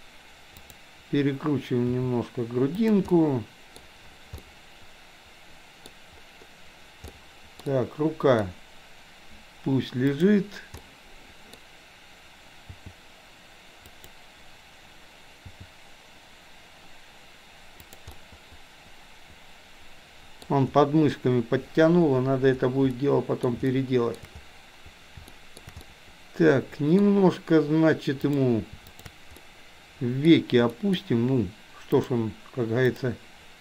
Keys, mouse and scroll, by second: 0.7 click, 1.8 r, 3.2-3.8 middle drag, 4.3-5.9 middle drag, 7.1-8.4 middle drag, 10.2 click, 10.8-11.6 middle drag, 12.7 g, 15.4 g, 18.2-21.7 middle drag, 22.9-23.4 scroll up 1, 23.7-24.1 shift+scroll up 1, 24.1-24.4 shift+scroll down 1, 25.3-26.3 shift+scroll up 2, 26.3-27.1 middle drag, 28.3 click, 28.9 shift+click, 29.4-30.4 middle drag, 30.8 middle click, 32.1 click.